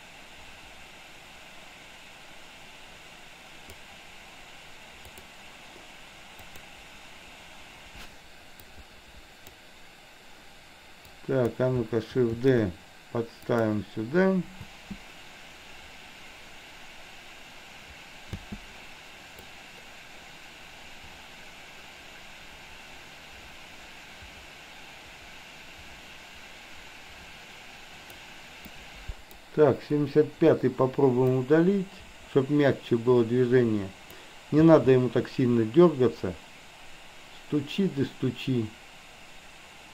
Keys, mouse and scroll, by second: 5.1 click, 6.3 click, 8.7-9.7 drag, 11.1 click, 12.5 shift+d, 14.7 space, 18.3 space, 19.6-28.2 drag, 28.7-29.6 drag, 30.1 Delete, 31.5-34.2 drag, 34.7 space.